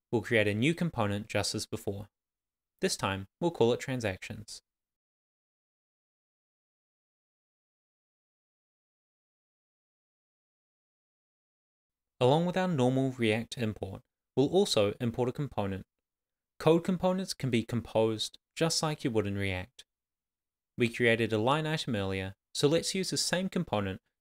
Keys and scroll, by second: 0.6 shift+t, 2.6 Return, 3.4 Down, 4.6 Return, 6.3-8.2 typing, 9.8-12.2 typing, 13.9 Left, 18.9 shift+d, 20.2-21.6 typing, 21.3 Left, 21.9 Left, 23.2 Right.